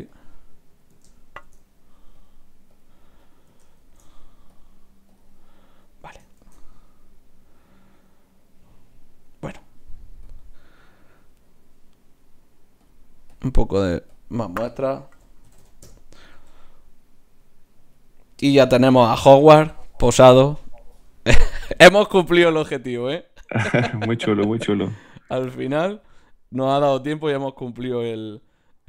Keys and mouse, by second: 0.5-2.2 right drag, 2.2-3.2 drag, 3.2-4.6 right drag, 4.6 click, 6.6 shift+z, 10.3-15.8 drag, 10.8-15.6 middle drag, 15.6 KP_0, 17.8-19.5 drag.